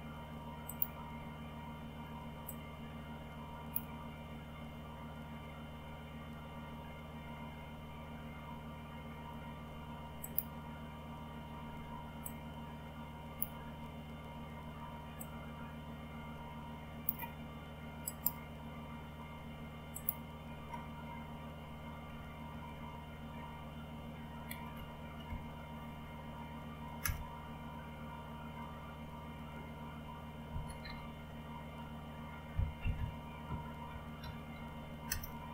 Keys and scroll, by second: 22.6 alt+Tab, 24.7 Up, 25.3 Up, 27.7 Return, 30.5 typing, 32.9-35.0 typing, 35.0 Return.